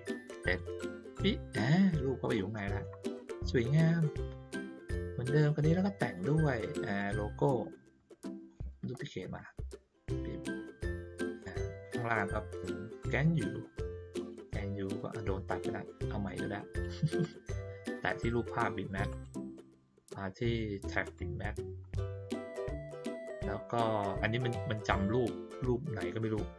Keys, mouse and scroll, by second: 0.4 click, 2.3 middle click, 4.0 click, 4.9 middle click, 5.8 middle click, 6.9 click, 9.3-10.9 drag, 11.4 middle click, 12.8 click, 13.6 middle click, 15.4 middle click, 16.7 click, 17.2 click, 19.0 click, 21.0 click.